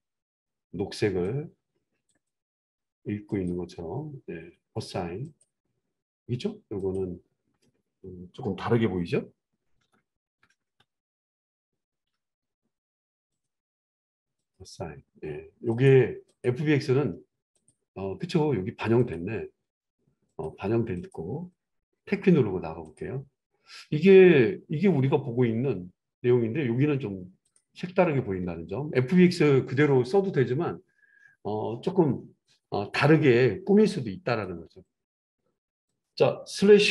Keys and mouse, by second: 5.3-6.9 drag, 6.9-13.3 middle drag, 9.8 ctrl+KP_Add, 10.0 ctrl+KP_Add, 10.2 ctrl+KP_Add, 10.4 ctrl+KP_Add, 10.6 ctrl+KP_Add, 10.8 ctrl+KP_Add, 13.3 click, 13.4-14.3 middle drag, 14.3-15.8 drag, 17.6 click, 18.9 click, 19.3-27.5 middle drag, 20.3 click, 22.1 Tab, 27.5 click, 27.6-36.6 middle drag, 36.6 click.